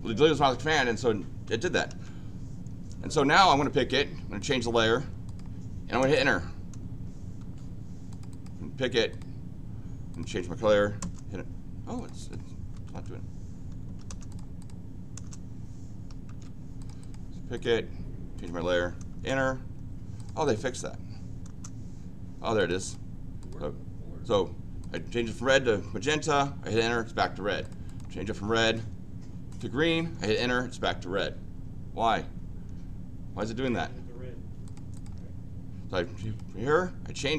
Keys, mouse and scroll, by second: 1.9 ctrl+z, 3.5 click, 4.4 click, 5.2 click, 6.1 Return, 7.5 Escape, 8.1 click, 8.3 click, 9.1 click, 10.1 click, 11.0 Return, 11.9 click, 12.2 click, 12.8 Escape, 14.3 click, 14.6 click, 16.4 z, 16.8 click, 17.0 click, 17.5 click, 18.3 click, 19.2 Return, 20.1 click, 20.4 click, 21.5 Return, 22.5 click, 22.8 click, 23.4 click, 24.8 click, 26.2 Return, 27.6 click, 27.8 click, 28.6 click, 29.5 click, 30.2 Return, 34.6 click, 34.9 click, 36.2 click, 37.1 click.